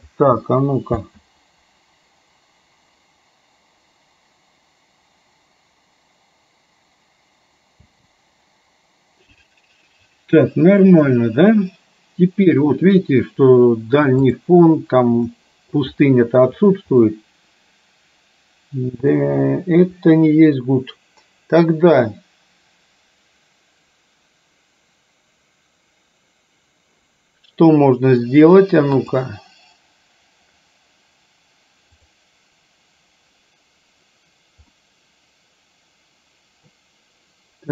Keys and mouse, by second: 1.2 space, 8.0 space, 14.3 click, 15.4 middle click, 17.1-19.2 middle drag, 34.8-36.9 middle drag.